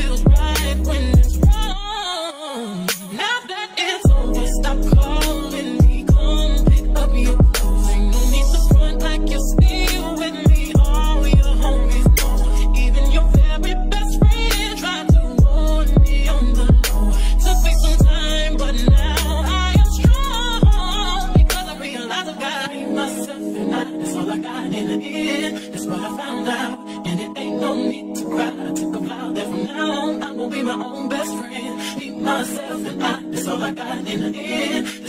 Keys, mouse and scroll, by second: 2.3 click, 2.8 click, 3.8 click, 4.3 middle click, 4.8 click, 5.7 g, 6.4 click, 7.4 middle click, 7.6 click, 8.3 middle click, 8.6 click, 9.3 middle click, 9.5-10.9 drag, 10.9 middle click, 11.2-13.8 drag, 13.8-15.4 middle drag, 14.4 g, 15.4-18.5 drag, 16.7 ctrl+z, 18.5 middle click, 18.9-20.9 drag, 20.3 ctrl+z, 20.9 middle click, 21.2-22.4 drag, 22.4 middle click, 22.8-24.0 drag, 24.0 middle click, 24.1 g, 24.7-26.0 drag, 26.0 middle click, 26.2-27.6 drag, 27.1 r, 27.6 middle click, 27.8 click, 27.8 middle click, 28.3-29.6 drag, 29.6 middle click, 29.9-31.3 drag, 31.3-32.9 middle drag, 32.1 g, 32.9-34.8 drag.